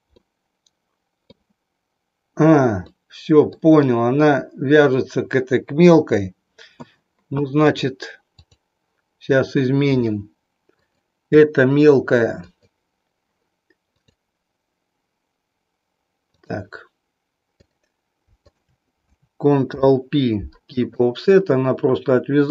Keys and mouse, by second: 0.1-1.3 middle drag, 2.8 middle click, 7.7 click, 10.8 click, 12.3 click, 14.1-16.5 drag, 17.6 click, 18.5 shift+click, 19.7 ctrl+p, 22.3 click.